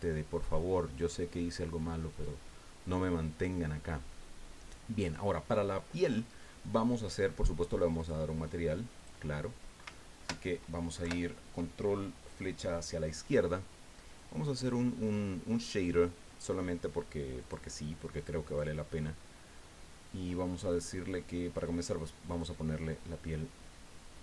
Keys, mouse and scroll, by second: 2.1 right click, 8.0 click, 9.0 click, 11.1 ctrl+Left, 14.2 click, 15.1-15.5 scroll down 2, 17.4 click, 18.5 click, 19.5-19.8 scroll up 2, 20.8 click, 22.4-24.2 drag.